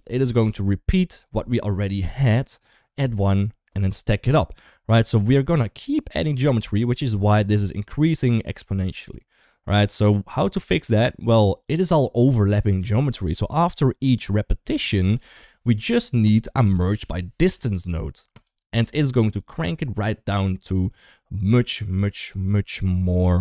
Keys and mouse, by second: 6.3 click, 6.7 click, 7.1 click, 8.5 shift+middle click, 9.7 click, 10.1 click, 13.0 shift+middle click, 14.6 shift+a, 22.7 shift+middle click.